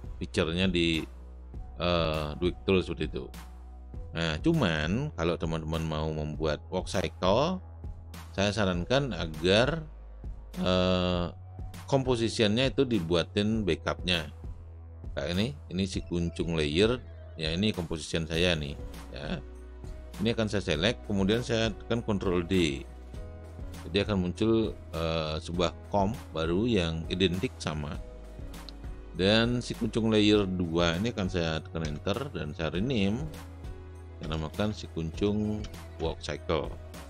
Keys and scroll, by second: 22.7 ctrl+d, 31.9 Return, 32.6 Right, 34.2-35.6 typing, 36.9-37.0 typing.